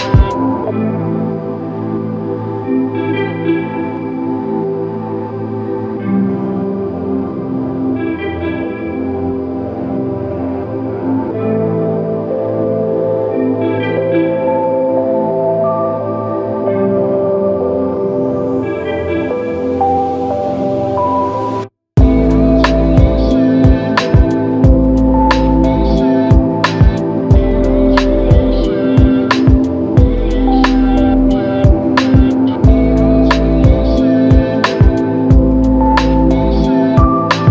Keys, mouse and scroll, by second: 10.8 shift+click, 21.7 alt+click, 22.8 ctrl+alt+click, 25.3 alt+shift+click, 26.4 ctrl+alt+click, 28.3 alt+click, 30.7 double click.